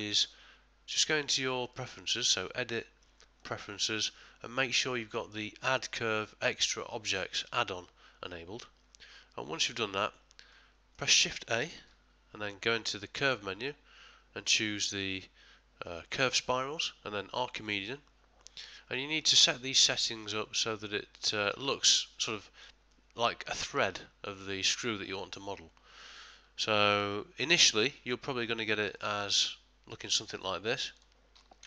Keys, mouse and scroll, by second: 1.6 click, 10.6 middle click, 11.8 shift+a, 19.3 ctrl+middle click, 20.6 ctrl+middle click, 21.3 ctrl+middle click, 21.8 shift+middle click, 22.5 ctrl+middle click, 22.9 ctrl+middle click, 30.9 click.